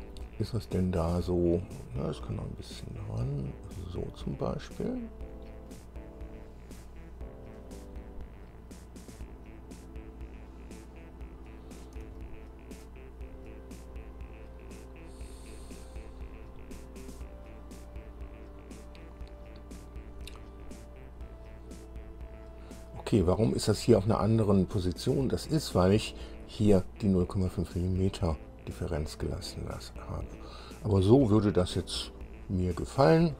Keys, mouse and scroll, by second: 0.2-0.6 scroll up 1, 0.8 scroll up 1, 2.4-4.4 drag, 4.6-5.3 scroll down 2, 5.9-7.2 drag, 7.4-7.9 scroll up 1, 8.0-9.4 drag, 9.4-12.2 middle drag, 12.4 shift+middle click, 13.5-13.8 shift+scroll up 1, 14.1 scroll up 1, 16.9 scroll down 1, 21.2-21.6 scroll down 1, 22.3 scroll up 2, 28.2-31.6 drag, 31.7-33.3 drag.